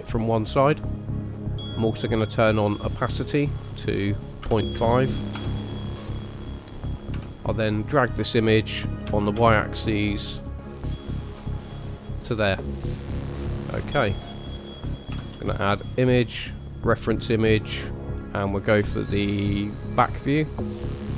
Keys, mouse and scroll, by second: 2.4 click, 3.3 click, 7.1 KP_3, 9.1 g, 11.6 middle click, 12.7-14.6 scroll down 1, 15.3 shift+a.